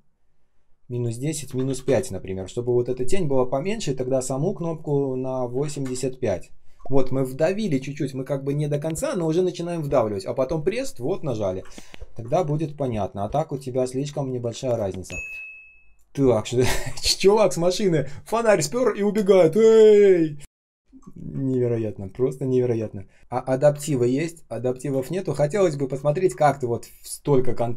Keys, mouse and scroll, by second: 1.5-2.3 typing, 5.5-6.2 typing, 11.6 ctrl+scroll down 1, 12.3 space, 12.8-13.2 scroll down 1, 12.8 space, 13.2 space, 14.8 ctrl+scroll up 1, 15.1 space, 15.6 space, 16.4 ctrl+scroll up 1, 21.3 ctrl+scroll up 1, 23.2 ctrl+scroll up 1, 23.2 ctrl+scroll down 1, 23.8 space, 24.3 space, 24.3 space, 24.9 ctrl+scroll up 1, 25.4 space, 25.9 ctrl+scroll up 1.